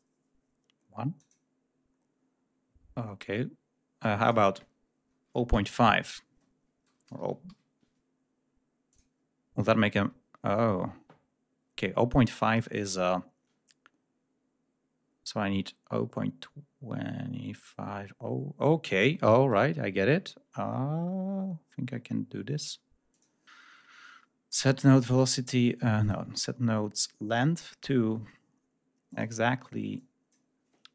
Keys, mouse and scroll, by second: 1.1 click, 3.9 click, 5.2 0, 5.3 ., 5.4 5, 6.8 BackSpace, 7.1 ,, 7.4 5, 8.8 click, 19.4 right click, 23.0 click, 26.0 click, 26.9 click.